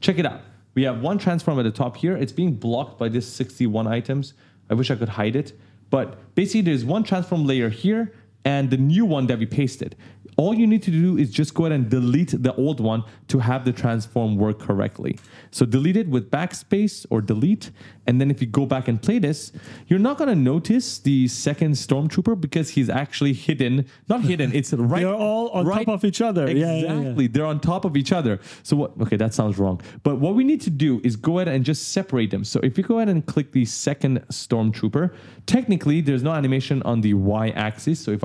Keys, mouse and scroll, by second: 3.3 click, 4.5 click, 5.2-5.5 scroll down 1, 6.2 click, 8.6 click, 10.6 click, 14.9 BackSpace, 18.3 click, 19.4 space, 19.7 right click, 22.6 click, 30.7 click, 31.2 right click, 33.0 click, 34.5 right click.